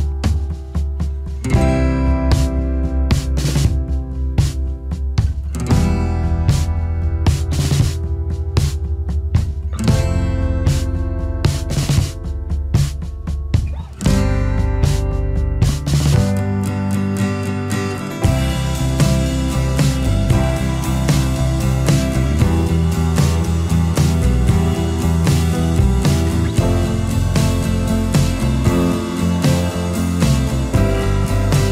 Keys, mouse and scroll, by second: 9.2 alt+shift+click, 11.5-12.8 alt+scroll up 1, 19.7-20.4 alt+scroll down 1, 20.4 space.